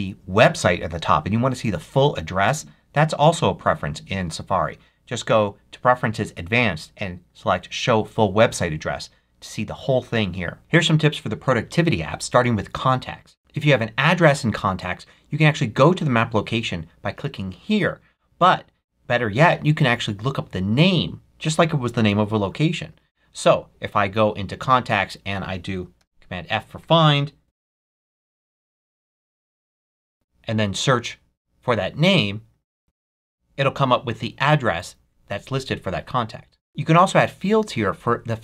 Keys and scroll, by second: 25.9 super+f, 27.8-29.8 typing.